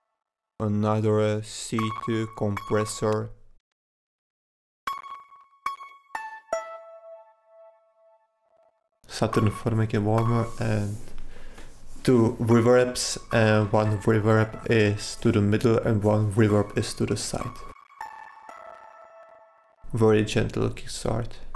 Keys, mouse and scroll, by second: 1.1 click, 2.5 click, 4.1-4.6 drag, 11.4-12.4 drag.